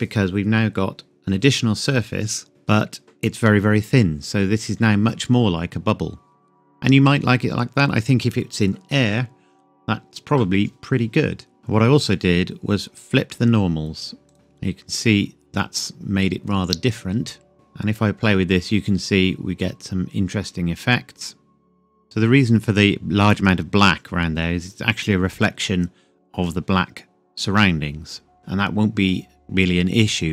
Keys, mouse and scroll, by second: 11.6 click, 14.3 click, 17.5 click, 22.0 KP_Enter, 26.3-28.3 scroll down 2, 30.0 click.